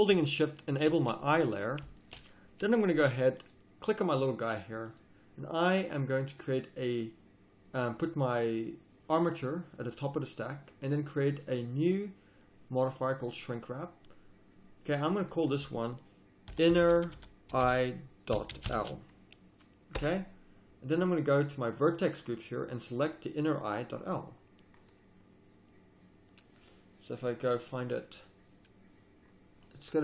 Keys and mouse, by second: 1.3-2.2 drag, 2.3-2.9 drag, 2.6 z, 5.8-13.4 drag, 15.2-16.8 drag, 16.8 n, 21.6-30.0 drag.